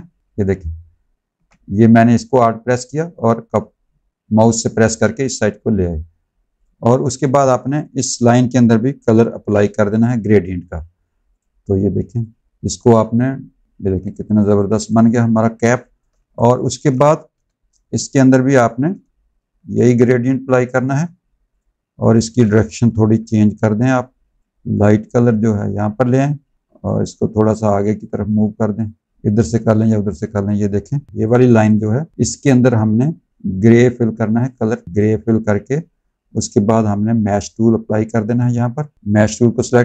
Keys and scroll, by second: 9.3 i, 13.7 z, 14.7 space, 15.6 space, 16.1 z, 17.2 v, 23.1 g.